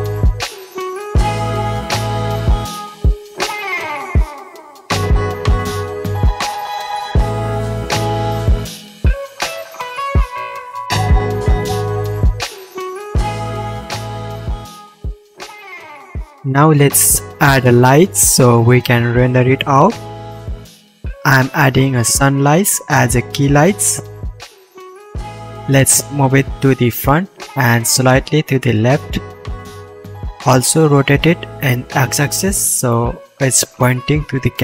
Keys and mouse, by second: 0.3 alt+h, 0.4 alt+a, 0.7 middle click, 0.7 right click, 0.9 ctrl+v, 1.1 click, 1.1 middle click, 1.1 right click, 2.6 ctrl+click, 2.7 ctrl+v, 2.9 middle click, 3.3 click, 3.4 middle click, 3.4 right click, 3.9 middle click, 4.7 ctrl+v, 4.9 middle click, 5.8 middle click, 6.6 alt+a, 9.2 KP_Decimal, 9.9 alt+a, 10.6 a, 11.1 KP_1, 11.4-11.9 drag, 11.4-11.9 right drag, 11.9-14.3 shift+middle drag, 14.3 click, 15.0 shift+middle click, 15.5 shift+middle click, 16.0-22.5 shift+drag, 16.0 shift+a, 22.5-25.5 middle drag, 26.3 r, 27.1 middle click, 27.5-28.2 drag, 28.2-30.0 middle drag, 28.8 r, 30.1 KP_1, 30.8-31.2 shift+middle drag, 31.7 r, 33.5 shift+a.